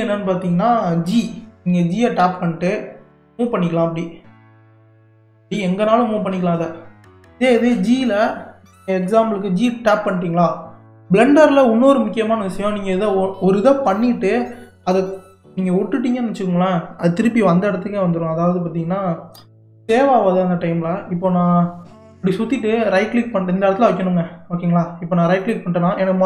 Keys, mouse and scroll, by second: 2.2 g, 19.9 g.